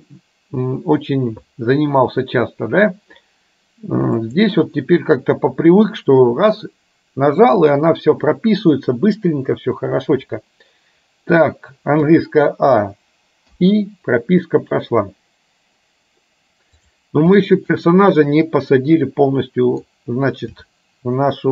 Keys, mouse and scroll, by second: 12.1 a, 13.6 i, 16.9 click, 17.5-20.0 middle drag, 20.6 g.